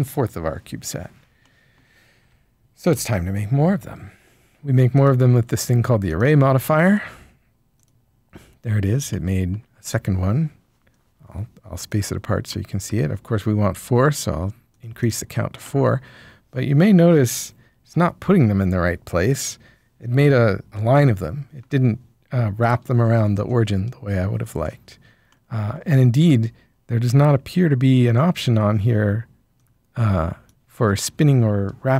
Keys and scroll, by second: 3.8 Tab.